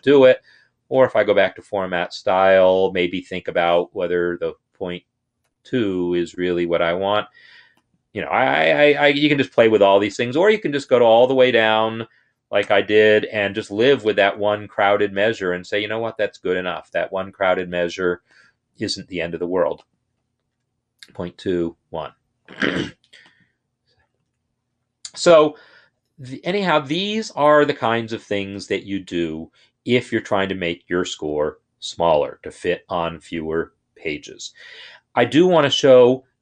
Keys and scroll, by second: 4.3 shift+Right, 5.3 BackSpace, 8.9 Left, 9.5 shift+Right, 9.9 BackSpace.